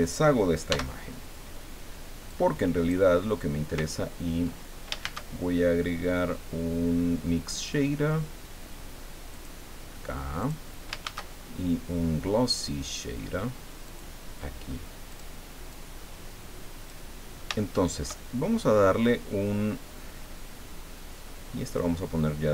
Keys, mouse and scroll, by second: 0.7 x, 2.3 click, 5.0 shift+a, 9.3 click, 10.4 click, 11.0 shift+a, 13.9 click, 15.1 click, 15.7-17.1 drag, 17.6 shift+click, 21.6 click.